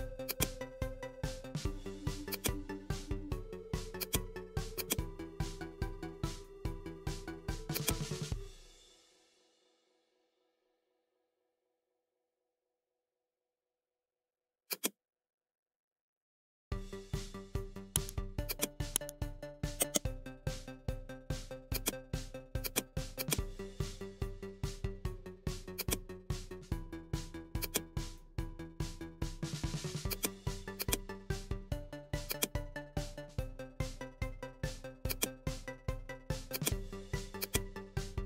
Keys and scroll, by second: 5.9 Up, 8.1 ctrl+d, 9.4 Up, 11.7 Right, 12.7 Up, 13.0 Right, 19.1 ctrl+alt+e.